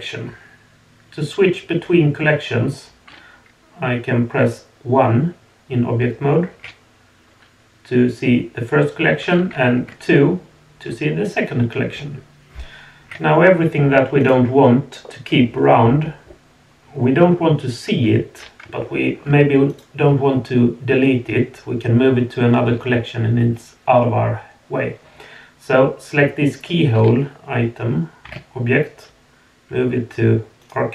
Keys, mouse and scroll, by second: 14.2 click, 15.0-15.9 middle drag, 16.0 middle drag, 16.4 middle drag, 16.7 drag, 16.8 middle click, 16.9 click, 17.0-17.4 middle drag, 17.1 click, 18.8 shift+middle drag, 19.2 shift+scroll up 1, 19.7 click, 20.3-22.0 middle drag.